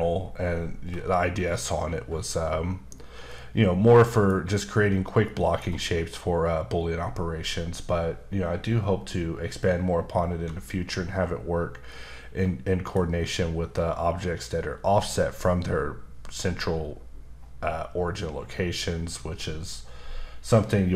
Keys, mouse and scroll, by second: 3.3 middle click, 5.2 middle click, 11.9 middle click.